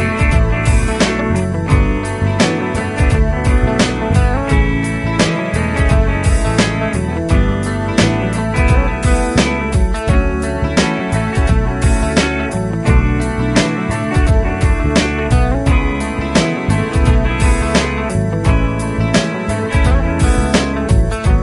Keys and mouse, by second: 1.8 Down, 3.4 right click.